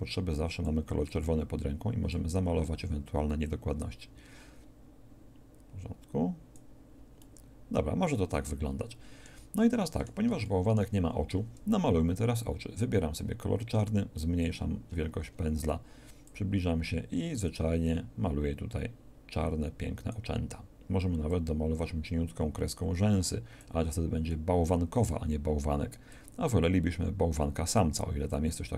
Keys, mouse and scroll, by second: 7.1-10.3 middle drag, 13.7 f, 26.1-28.7 drag.